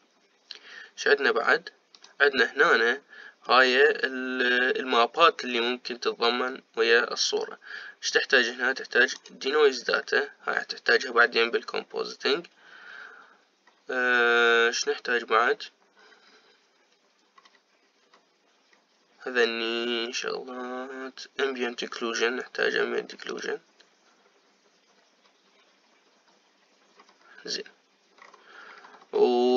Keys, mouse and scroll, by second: 1.1-1.9 scroll down 2, 3.2 click, 10.4-13.3 drag, 13.8-14.9 scroll up 1, 14.9-15.8 scroll up 2, 17.1-17.9 scroll down 3, 17.9-18.6 scroll down 1, 18.6-21.1 scroll down 7, 21.1 scroll down 1, 24.8 click, 26.2-26.7 scroll down 2, 27.2-28.2 scroll down 3, 28.2-29.4 scroll down 3, 29.4-29.5 scroll up 25.